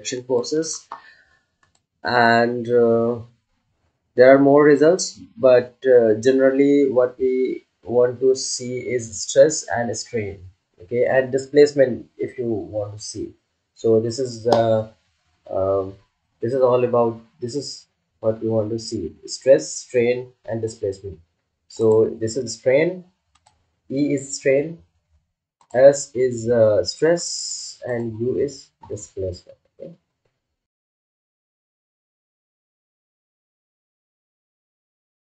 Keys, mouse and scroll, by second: 21.7 click, 21.8 click, 25.5 click.